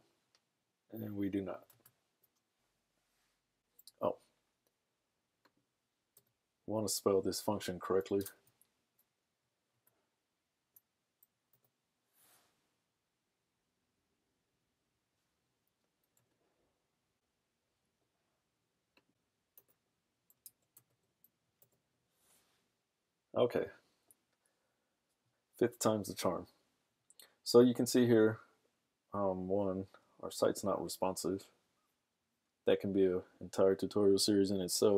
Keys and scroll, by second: 8.2 super+s, 11.6 super+r, 20.5 super+s, 21.1 super+Tab, 22.0 super+r.